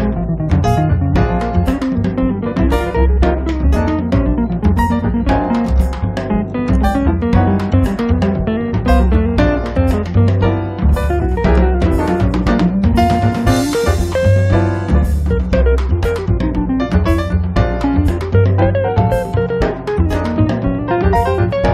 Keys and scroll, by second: 0.3 space, 2.9 m, 7.3 space, 14.1 m, 17.4 space, 20.5 r.